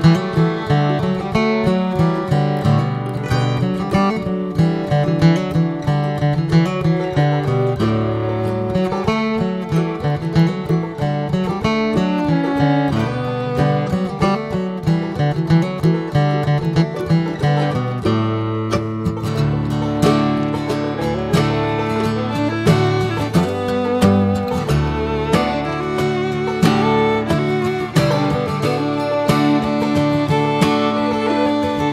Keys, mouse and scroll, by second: 0.8 shift+click, 1.2-4.3 middle drag, 4.3 click, 4.8-5.8 middle drag, 5.8 click, 6.3-9.1 middle drag, 12.5 click, 13.0 middle click, 13.5 shift+click, 14.0 middle click, 15.9 middle click, 16.3 Tab, 16.6 Tab, 16.9 click, 17.3 shift+middle click, 17.9 shift+click, 18.3-19.5 middle drag, 19.5 shift+click, 21.0 middle click, 21.9 shift+click, 22.4-23.4 middle drag, 23.4 shift+click, 23.9 middle click, 24.8 shift+click, 25.2-26.3 middle drag, 26.3 ctrl+z, 27.1 middle click, 27.7 shift+click, 28.1 middle click, 28.7 shift+click, 29.1-30.1 middle drag, 30.1 shift+click, 30.5 middle click, 31.4 scroll up 1, 31.8 middle click.